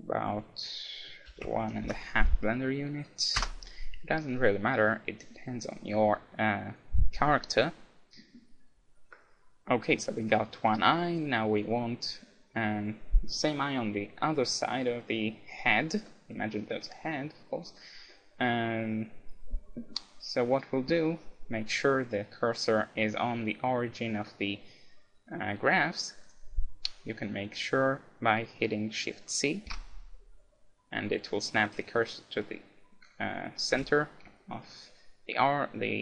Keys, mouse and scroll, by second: 4.4-6.4 middle drag, 16.1-20.6 middle drag, 21.1-23.1 middle drag, 26.2-28.0 drag, 29.7 shift+c, 33.7 t, 34.4-36.0 middle drag.